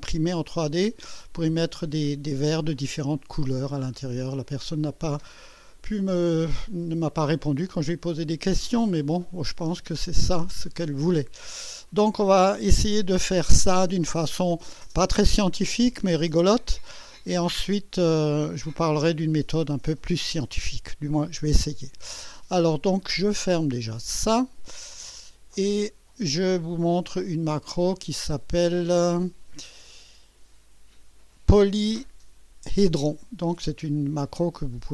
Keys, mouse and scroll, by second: 0.5-1.3 drag, 4.4-7.1 drag, 7.8 scroll up 1, 8.0 scroll down 1, 8.9 right click, 9.8 scroll down 1, 10.3-11.7 drag, 24.2 click, 25.5 click, 27.4 click.